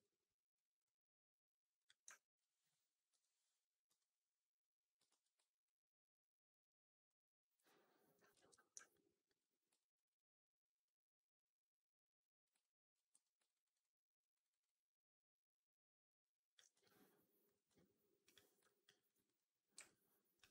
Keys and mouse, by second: 0.7 click, 1.7 click, 2.0 alt+click, 3.0 Up, 3.8 r, 5.0 shift+x, 7.6 alt+middle click, 8.2 ctrl+z, 8.8 click, 9.7 alt+click, 10.7-12.3 drag, 12.5 alt+click, 13.0 4, 13.3 right drag, 13.5 right drag, 13.7-14.1 drag, 14.2 alt+right drag, 14.4 alt+right drag, 14.5-16.4 alt+drag, 16.6 q, 17.6 q, 18.6 alt+drag, 18.8 right drag.